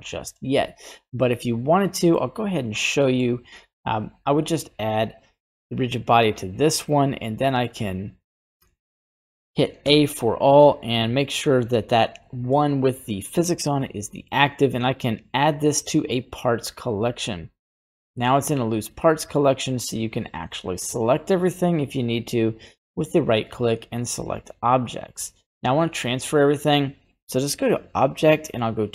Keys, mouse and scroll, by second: 1.1-2.2 middle drag, 2.1 scroll up 1, 3.0 middle click, 8.2 right click, 9.2 middle click, 9.8 a, 10.8 shift+right click, 11.4 shift+right click, 13.8 middle click, 16.0 click, 17.4 click, 22.8-24.9 right drag, 26.0-28.9 drag.